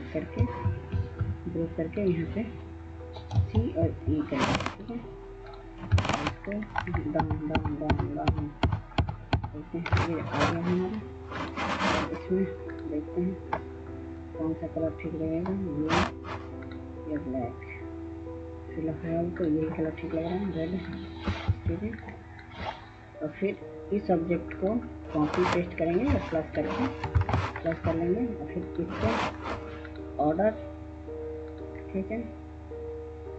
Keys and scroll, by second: 0.1 ctrl+g, 3.1 typing, 4.5 typing, 6.6 ctrl+Page_Down, 7.0 ctrl+Page_Down, 21.3 F2, 26.9 +.